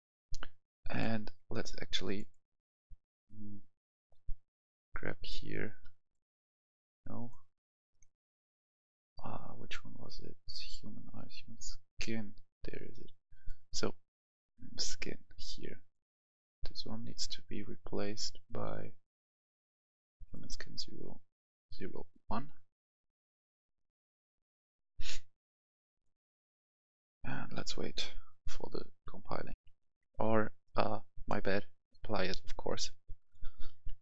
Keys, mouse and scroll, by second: 1.7 click, 31.1 click.